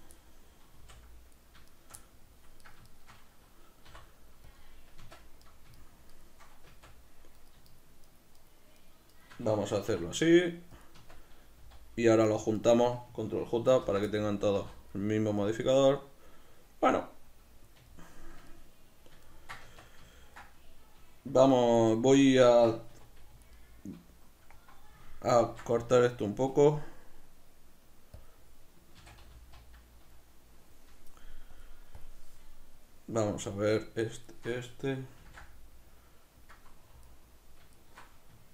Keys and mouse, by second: 0.1-1.3 middle drag, 0.7 z, 1.3 right click, 2.0 middle click, 2.9-3.9 shift+right drag, 3.9 e, 4.6 click, 5.0 Tab, 5.5 shift+right click, 6.7 Tab, 7.4-9.9 shift+right drag, 9.9 e, 10.9 click, 11.0 Tab, 12.3-13.8 shift+right drag, 13.8 ctrl+j, 14.0-21.8 middle drag, 14.6 z, 19.6 Tab, 21.8-22.9 alt+right drag, 22.9 2, 23.5-25.5 alt+right drag, 25.5 ctrl+b, 28.3 click, 29.0 a, 29.3 z, 31.5 click, 32.0 click, 33.5-35.2 alt+right drag, 35.2 ctrl+b, 36.5 click, 37.1-38.5 alt+right drag.